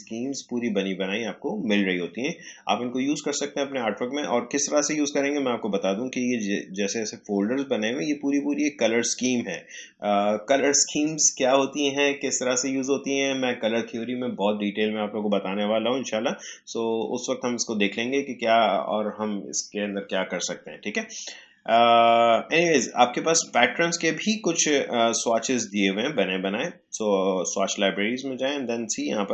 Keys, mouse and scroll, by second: 23.3 click.